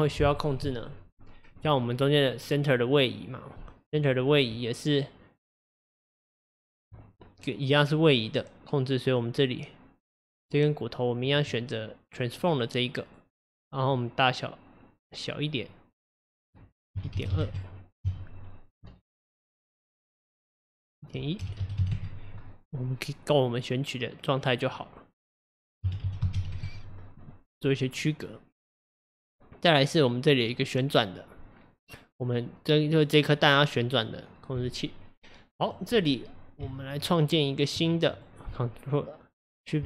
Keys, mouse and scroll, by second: 2.4 click, 3.0 click, 3.5 click, 3.9 click, 4.6 Tab, 10.1 click, 11.3 click, 14.0-18.1 drag, 18.1 KP_1, 19.3-21.1 middle drag, 21.1-22.8 drag, 22.8-25.5 middle drag, 25.5-27.7 drag, 27.7 scroll down 1, 28.1-29.9 middle drag, 29.9 click, 30.4 click, 35.7 click, 36.7 Tab, 38.1 click.